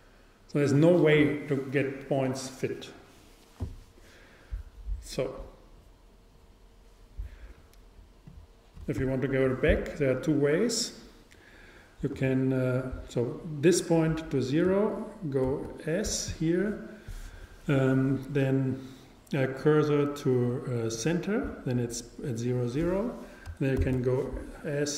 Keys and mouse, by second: 8.3-10.2 drag, 15.5 shift+s, 23.8 shift+s.